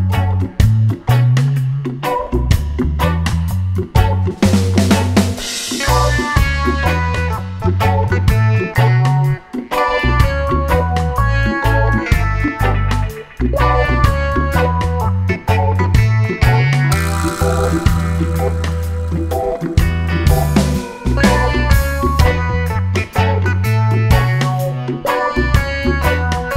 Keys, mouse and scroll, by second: 2.3 click, 4.6-6.0 drag, 7.7 click, 8.9 click, 12.0 click, 13.8-15.4 drag, 17.4 click, 18.3 click, 20.6 click, 22.3-23.7 drag, 25.4 click, 26.2 click.